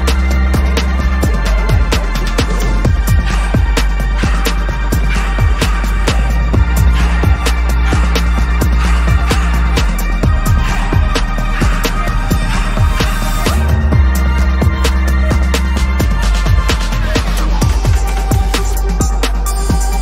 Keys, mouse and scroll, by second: 0.2 double click, 5.0 ctrl+-, 5.2 ctrl+-, 5.8 space, 6.8 ctrl+=, 7.1 ctrl+=, 7.3 ctrl+=, 7.5 ctrl+=, 7.9 ctrl+=, 8.2 space, 9.8 p, 14.0 double click, 14.6 right click, 18.7 alt+click.